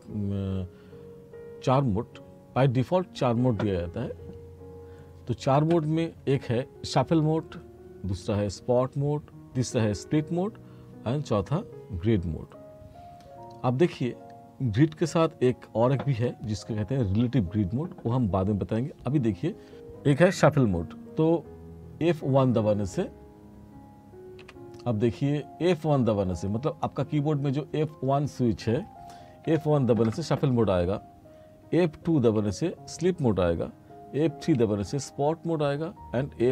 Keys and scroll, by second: 24.5 F4, 29.5 F1, 32.2 F2, 34.6 F3.